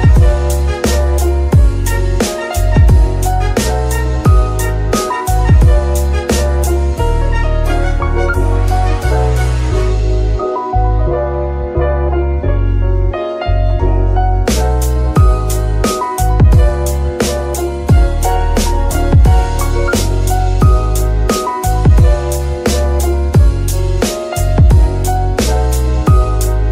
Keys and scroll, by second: 1.3 shift+s, 3.7 s, 6.1 Tab, 8.8 shift+s, 10.0 Tab, 16.3 shift+s, 18.4 KP_1, 19.9 KP_3, 26.2 shift+s.